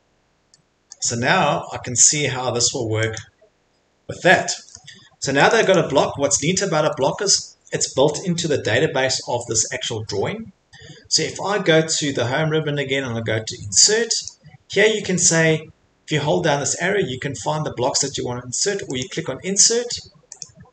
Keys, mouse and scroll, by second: 0.9 scroll, 2.7 middle click, 3.2 click, 3.5 click, 3.6 Escape, 3.8 Escape, 3.9 middle click, 4.0 Escape, 4.0 middle click, 4.7 middle click, 5.0 middle click, 5.5 click, 5.8 click, 6.1 middle click, 6.2 middle click, 6.7 Escape, 6.9 Escape, 7.3 middle click, 14.2 click, 19.0 click.